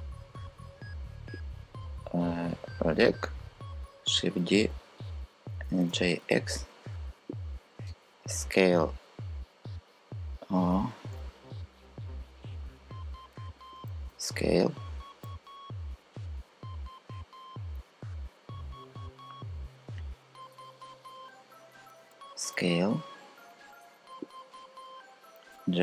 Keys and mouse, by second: 0.0-1.4 shift+drag, 3.6 shift+d, 4.2 Return, 5.5 g, 5.9 x, 7.8 s, 10.4 Escape, 12.6 click, 13.7 x, 15.6 s, 19.6 Escape, 21.9 s, 25.1 g.